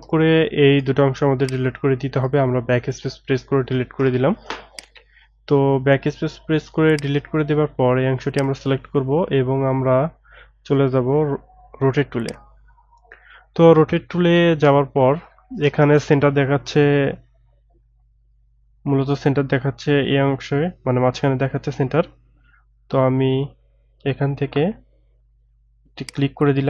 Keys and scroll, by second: 0.9 BackSpace.